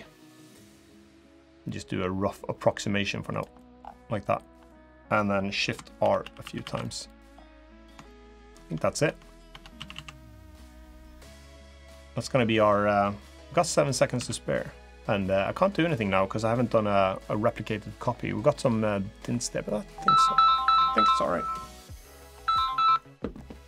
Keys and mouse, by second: 3.3 middle click, 4.4 middle click, 5.8 shift+r, 6.0 shift+r, 6.2 shift+r, 6.4 shift+r, 6.6 middle click, 7.8 shift+click, 8.0 shift+middle click, 8.8 Tab, 9.3 Tab, 9.6 a, 9.7 a, 10.1 middle click, 10.9 click, 13.9 Tab, 17.2 middle click, 19.4 middle click, 23.4 click.